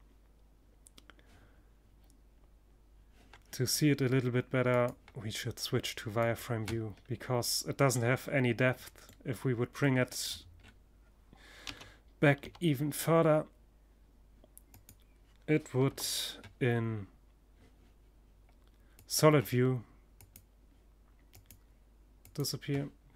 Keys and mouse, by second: 3.1 click, 10.1 g, 11.2-13.3 middle drag, 14.3 KP_0, 15.1 middle click, 15.3-16.7 middle drag, 17.4-19.1 drag, 19.8-21.5 drag.